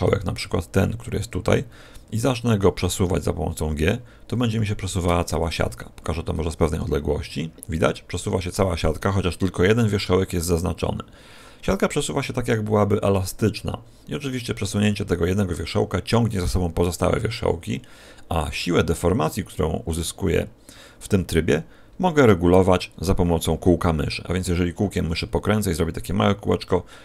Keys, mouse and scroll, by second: 3.0 g, 5.4-6.8 scroll down 6, 6.8 g.